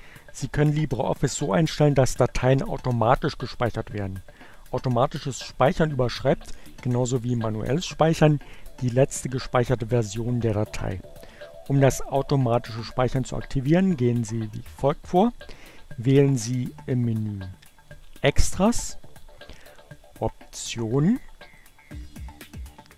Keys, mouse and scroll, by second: 16.2-17.9 drag, 20.6-22.2 drag.